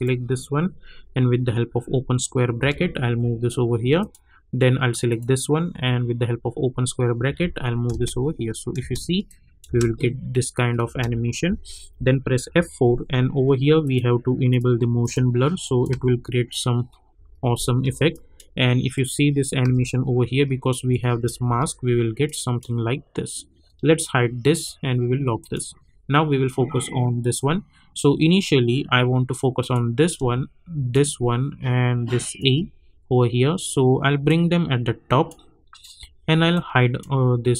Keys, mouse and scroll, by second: 2.6 [, 4.0 click, 7.2 [, 7.9 space, 9.2 click, 9.6 space, 12.4 F4, 13.8 click, 15.9 space, 18.1 click, 19.6 space, 22.2-24.5 drag, 29.5 click, 30.9 shift+click, 34.5 click.